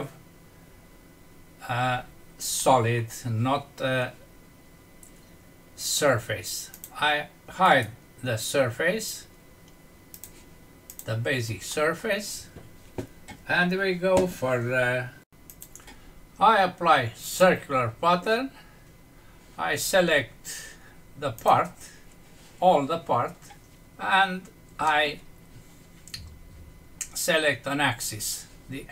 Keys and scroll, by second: 2.6 F6, 11.6 F6.